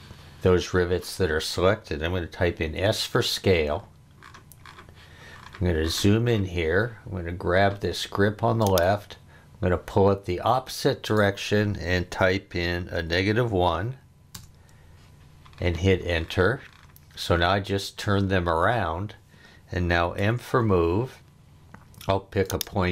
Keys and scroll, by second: 2.6 s, 12.9 -, 13.4 1, 14.3 Return, 20.2 m.